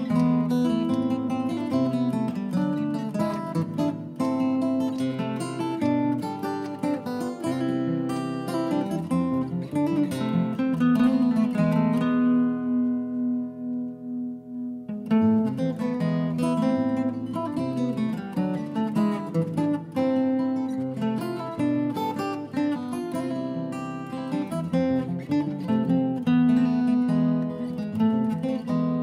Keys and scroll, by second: 3.6-4.6 typing, 9.0-10.0 typing, 11.6-15.0 typing, 21.4-22.3 typing.